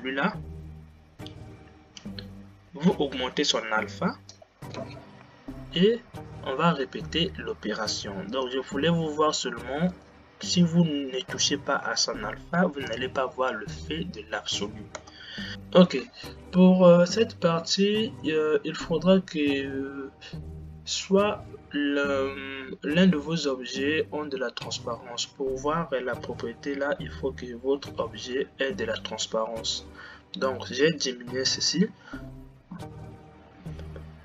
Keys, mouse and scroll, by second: 6.0 shift+Left, 8.5 click, 10.3 click, 13.3 g, 15.5 click.